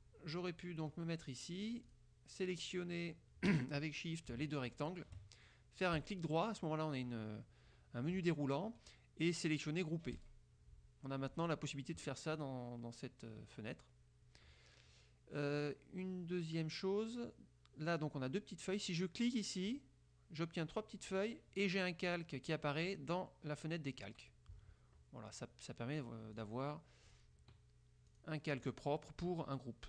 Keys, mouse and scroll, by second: 2.0 click, 4.8 shift+click, 6.1 right click, 10.3 click, 19.8 click, 22.2 click, 26.4 click, 27.2 click, 28.2 click, 28.8 click.